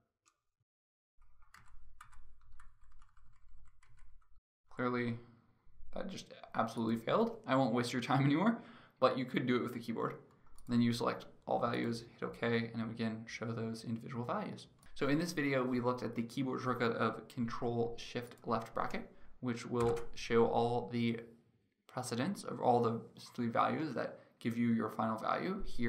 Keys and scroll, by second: 20.4 ctrl+shift+[.